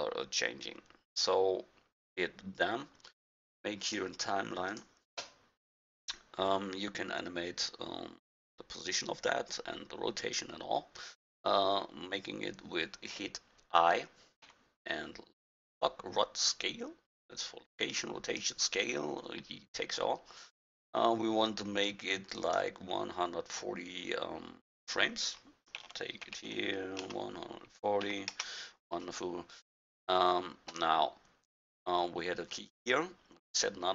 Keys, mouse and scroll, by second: 3.9-5.5 drag, 14.5 i, 24.7-26.4 drag.